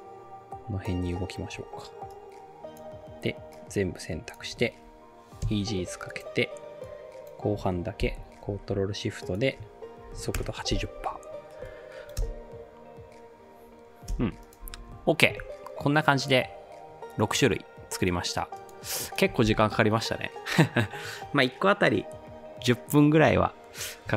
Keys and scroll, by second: 5.5 F9, 8.1 ctrl+shift+k, 9.8-10.7 typing, 12.2 space, 14.1 space, 14.8 ctrl+s.